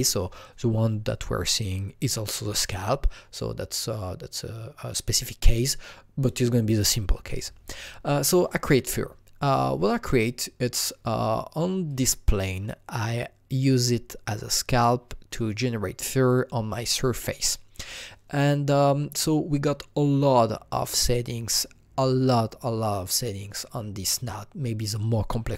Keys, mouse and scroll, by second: 11.9-14.8 drag, 15.3-17.8 drag, 17.8-19.2 drag, 19.2 click, 22.8 click.